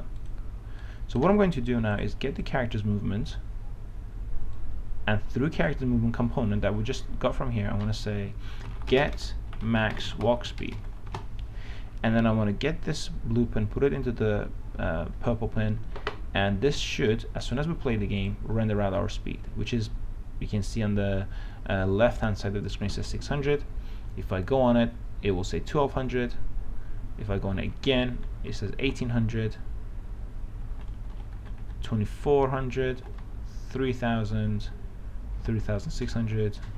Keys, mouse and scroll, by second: 0.4-6.9 drag, 8.8-11.3 typing, 13.1-16.0 drag, 24.0-24.4 w, 24.9 w, 35.6-36.7 typing.